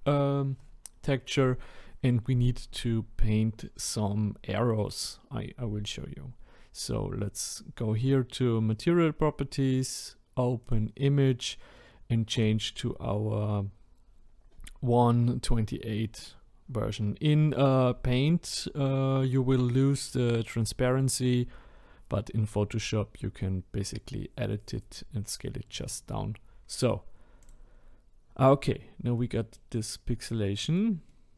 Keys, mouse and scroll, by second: 10.8-27.5 drag, 28.8-29.1 scroll down 1, 29.1-30.0 middle drag, 30.0 scroll down 1, 30.5-31.3 middle drag.